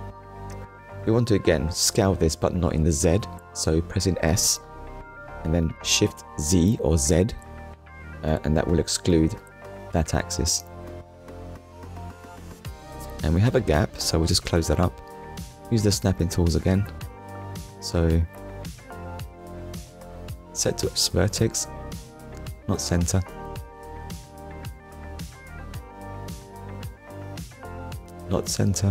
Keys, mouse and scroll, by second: 1.1 shift+z, 5.3 click, 7.2 click, 7.7 middle click, 9.6 Tab, 10.1 middle click, 10.8 scroll up 1, 11.5 KP_1, 12.3 scroll up 1, 14.3 scroll down 1, 14.9-15.2 scroll down 1, 15.4 shift+scroll down 1, 15.6 shift+middle click, 16.2 scroll up 1, 20.2 click, 26.2 click, 27.5 click.